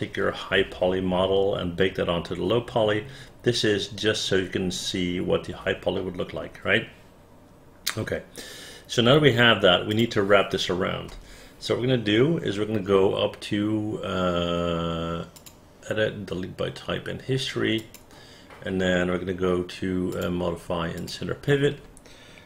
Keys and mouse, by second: 10.0 click, 11.2 space, 17.9 click.